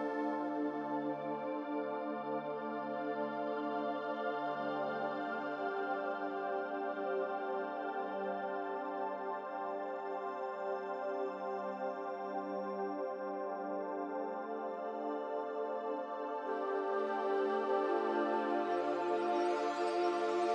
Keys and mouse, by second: 0.9 click, 2.3 Tab, 3.9-5.0 middle drag, 6.2 click, 8.6 click, 10.0-11.2 middle drag, 11.5 Tab, 15.1 click, 17.1 shift+click, 20.2 shift+click.